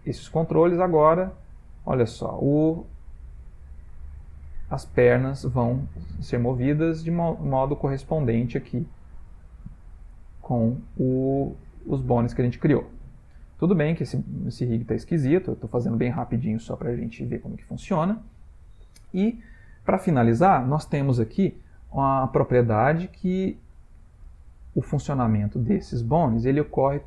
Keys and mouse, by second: 1.9 click, 2.2 r, 4.2 click, 4.4 r, 5.7 click, 5.9 r, 7.2 click, 7.4 r, 9.0 click, 9.4-9.8 middle click, 9.5 middle click, 9.7 middle click, 10.1 r, 11.4 click, 11.7 r, 13.1 ctrl+middle click, 13.3 ctrl+middle click, 14.3 shift+middle click, 15.0 ctrl+middle click, 15.2 ctrl+middle click, 15.6 shift+middle click, 16.7 middle click, 17.6 shift+middle click, 24.1 shift+middle click, 25.1 click.